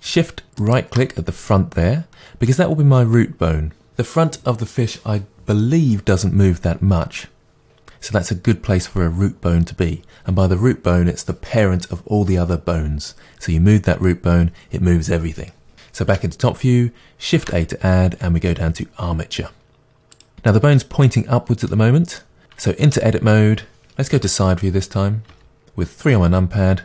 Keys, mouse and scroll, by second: 0.6 shift+right click, 1.5 middle click, 16.1 KP_7, 17.4 shift+a, 21.7-22.9 middle drag, 22.9 Tab, 25.3 KP_3.